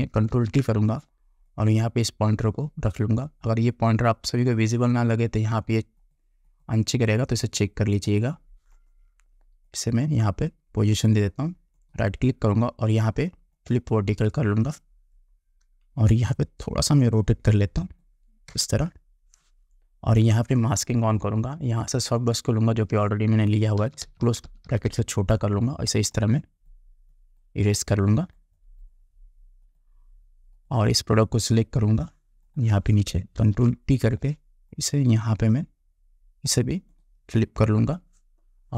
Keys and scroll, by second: 0.4 ctrl+t, 18.6 Return, 23.9 [, 33.5 ctrl+t.